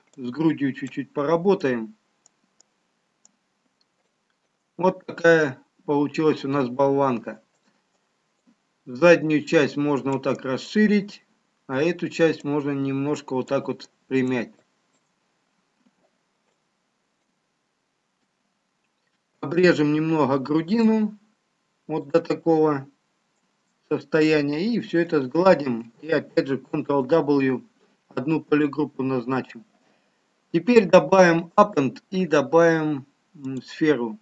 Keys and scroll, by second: 24.7 ctrl+shift+space, 30.5 ctrl+w.